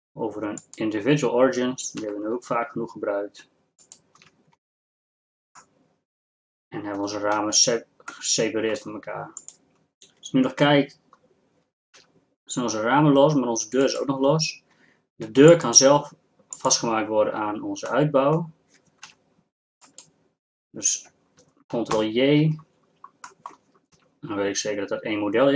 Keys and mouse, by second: 2.0 s, 4.6 Tab, 5.9-7.1 middle drag, 7.3 middle click, 12.2 g, 19.2 g, 22.0 ctrl+j, 24.1 g.